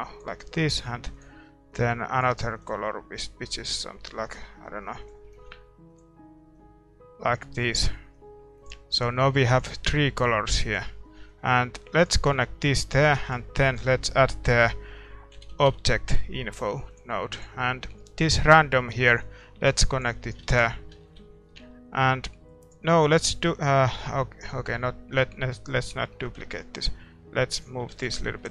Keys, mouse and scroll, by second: 12.4-28.5 drag, 12.4-20.3 middle drag.